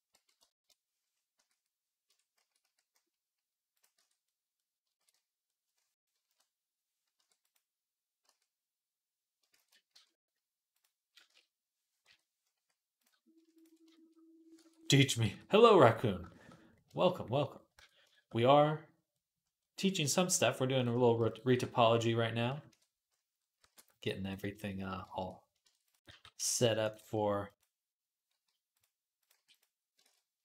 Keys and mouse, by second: 1.1 q, 1.9 Tab, 2.2 a, 2.4 q, 3.8 Tab, 5.4 ctrl+s, 6.0 KP_3, 6.9 q, 8.0 q, 9.2-13.2 ctrl+drag, 9.2-25.1 ctrl+right drag, 9.4 ctrl+z, 9.7 q, 11.1 Tab, 11.9 /, 13.2 shift+a, 14.4 Tab, 15.5 ctrl+s, 17.6 Tab, 20.6 click, 20.6 middle click, 21.1 click, 21.1 middle click, 21.1 shift+a, 22.5 KP_3, 23.4 e, 25.5 shift+Tab, 25.7 click, 25.7 right click, 25.9 g, 26.6 click, 26.6 right click, 26.8 g, 28.1 g, 29.2 g, 29.4-30.4 right drag, 29.9 ctrl+z, 30.3 shift+Tab.